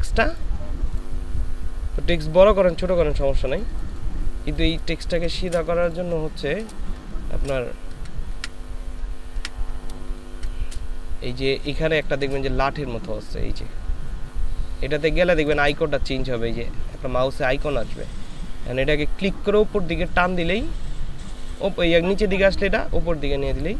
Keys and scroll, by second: 4.9 ctrl+space, 10.1 ctrl+super+space, 12.2 ctrl+space, 15.0 ctrl+space.